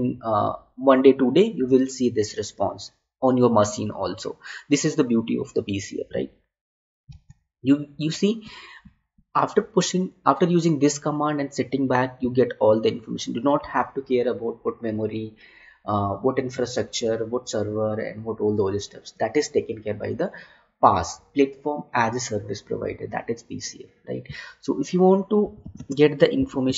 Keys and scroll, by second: 7.5 alt+Tab, 25.7 space.